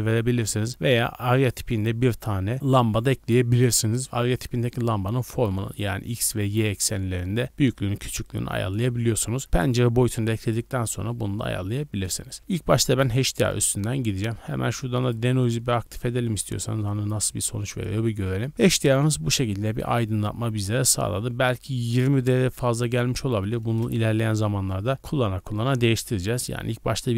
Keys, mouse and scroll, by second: 11.7-12.1 middle drag, 12.1 scroll up 2, 12.4 z, 14.1-15.6 drag, 21.9-24.3 drag.